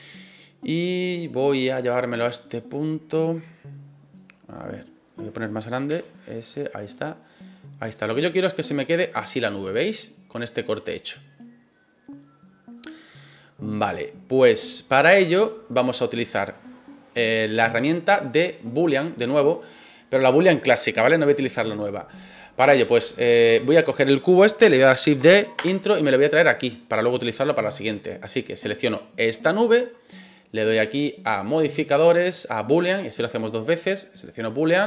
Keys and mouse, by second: 1.2 click, 2.6 middle click, 4.1 click, 5.9 s, 6.4 click, 6.9-8.8 drag, 9.0-11.3 middle drag, 12.7 click, 14.3 right click, 15.4 right click, 16.2 right click, 19.1 right click, 23.6 right click, 25.1 shift+d, 25.6 Return, 26.3 click, 28.6 right click, 30.5 click, 31.4-32.8 drag.